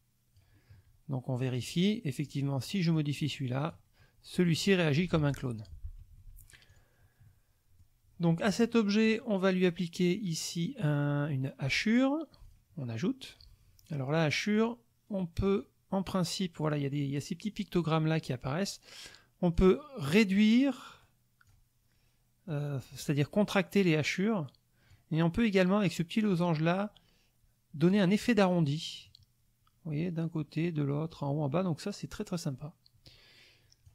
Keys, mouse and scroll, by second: 1.6 click, 2.2 click, 2.9 click, 4.3 click, 5.1 ctrl+z, 5.6 ctrl+click, 6.0 ctrl+F1, 6.2 ctrl+click, 6.7 ctrl+click, 7.3 click, 7.4 middle click, 9.1 click, 11.6 click, 12.4 click, 14.5 click, 15.5 click, 19.5-21.0 drag, 21.0-21.7 scroll down 1, 21.7-22.5 scroll down 1, 22.5-25.1 drag, 26.3-28.1 drag, 29.0-33.9 drag.